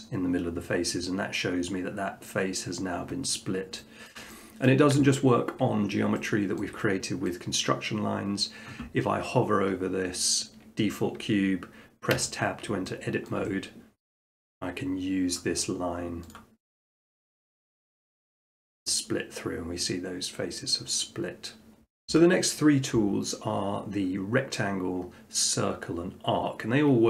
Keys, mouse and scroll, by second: 3.1-3.8 scroll up 2, 4.1 shift+middle click, 4.7 middle click, 5.0 Tab, 5.8 middle click, 6.6 shift+middle click, 7.3 middle click, 12.2 Tab, 13.3 shift+middle click, 14.4 middle click, 16.3-17.4 drag, 18.4-19.5 drag, 22.1 Tab.